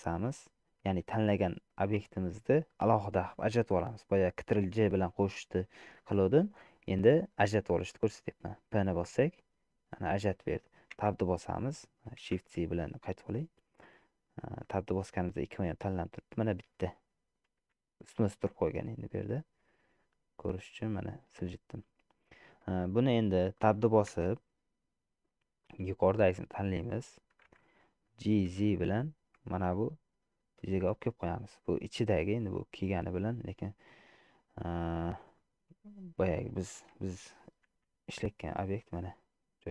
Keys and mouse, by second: 11.1 Tab, 12.6 shift+z, 14.0 middle click, 17.8 g, 22.4 middle click, 23.6 shift+middle click, 24.4 Tab, 25.8-27.1 drag, 28.6 g, 32.7 click, 34.0 click, 35.5 shift+click, 37.0 Tab, 37.9 g.